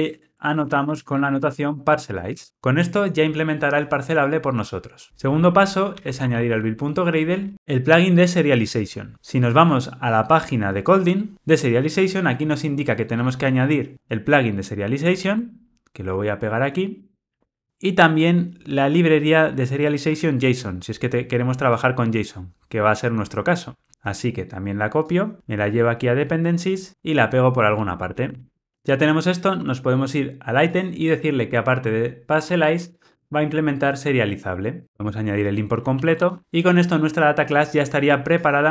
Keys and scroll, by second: 2.4 Return, 28.3 super+v, 34.8 alt+Return, 36.2 alt+super+l.